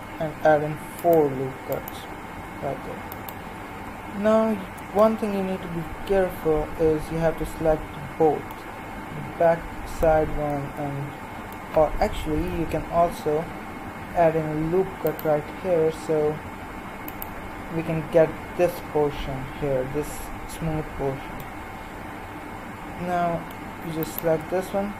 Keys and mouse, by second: 12.3 KP_1, 14.0 ctrl+r, 19.6 middle click, 21.5-24.0 middle drag, 24.0-24.9 right drag.